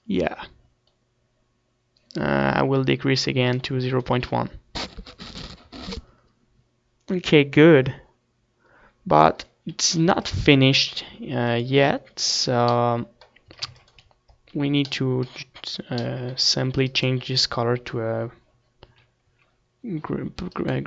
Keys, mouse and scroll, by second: 4.1-6.0 drag, 9.9-11.7 middle drag, 10.1 ctrl+s, 11.7-13.1 drag, 12.9 middle click, 13.7 a, 14.0 ctrl+s, 17.4-19.1 right drag, 19.2 z, 19.7 z.